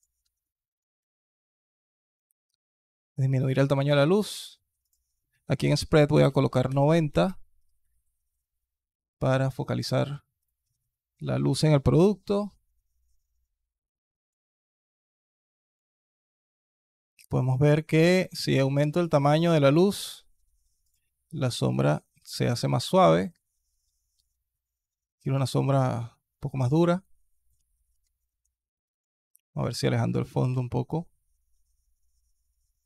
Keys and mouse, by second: 0.1 alt+drag, 0.4 alt+click, 0.8 s, 15.9 s, 22.5 alt+click, 23.0 s, 26.8-27.3 alt+drag, 27.8-28.1 alt+drag, 28.5-29.0 alt+drag, 29.3-29.7 alt+drag, 30.1 g.